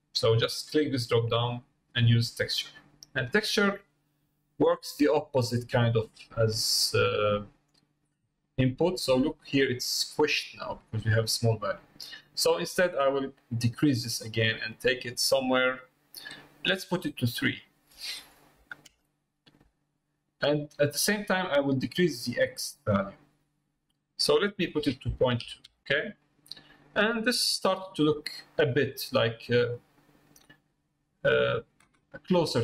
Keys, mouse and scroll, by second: 1.7-3.1 drag, 12.8-16.7 drag, 17.6-20.4 drag, 22.2-24.0 drag, 24.3-25.8 drag, 26.2-28.0 middle drag, 28.5 middle click, 29.2 middle click, 30.0 middle click, 30.6 middle click, 31.1 middle click.